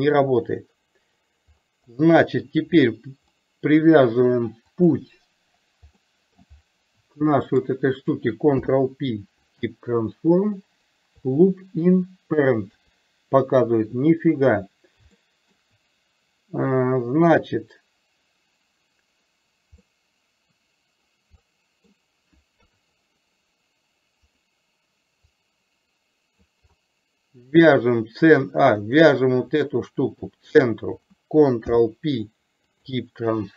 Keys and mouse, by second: 2.0-2.5 middle drag, 3.4-3.8 middle drag, 4.9 click, 6.2-6.5 middle drag, 7.5 shift+click, 8.6 ctrl+p, 12.8 KP_3, 15.3 middle drag, 19.9-21.1 middle drag, 21.5-22.0 middle drag, 22.8 KP_3, 24.4 click, 25.4-26.6 drag, 28.9 click, 31.6 ctrl+p.